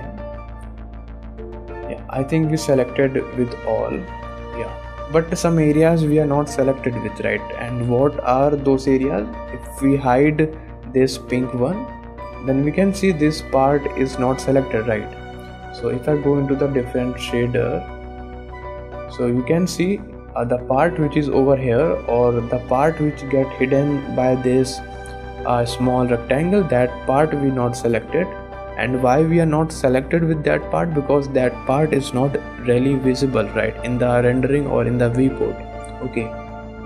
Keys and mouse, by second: 0.8 click, 1.3-2.5 middle drag, 3.8 click, 4.7 shift+click, 5.6 middle click, 12.0 click, 12.7 middle click, 13.2 middle click, 16.1-18.9 drag, 19.9 middle click, 20.7 shift+middle click, 21.0 middle click, 24.0 click, 24.5 middle click, 28.2 click, 28.8 middle click, 34.5 shift+middle click.